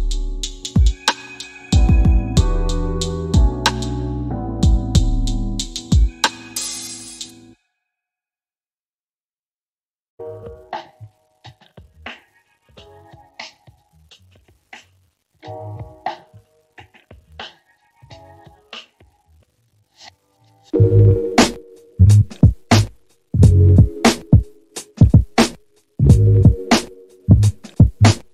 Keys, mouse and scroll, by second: 2.9-9.3 drag, 11.7 click, 19.9-28.3 drag.